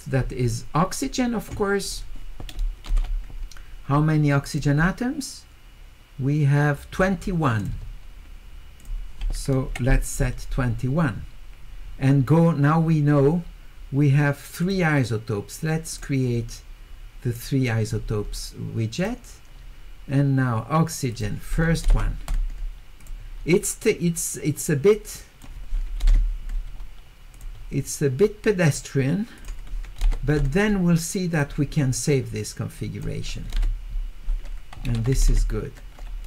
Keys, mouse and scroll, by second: 1.8 click, 4.5 click, 7.6 click, 13.2 middle click, 13.2 scroll up 2, 14.6 click, 15.9 click, 16.4 middle click, 16.4-16.9 scroll, 16.7 middle click, 19.0 click, 21.1 click, 23.0 click, 24.9 click, 27.3 click, 29.4 click, 31.3 click, 32.7 click.